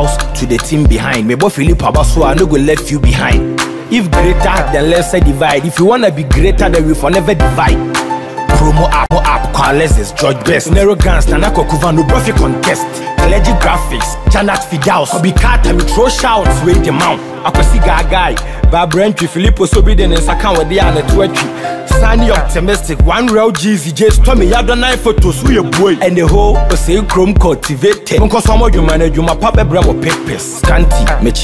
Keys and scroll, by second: 15.3 ctrl+t, 18.6 Return.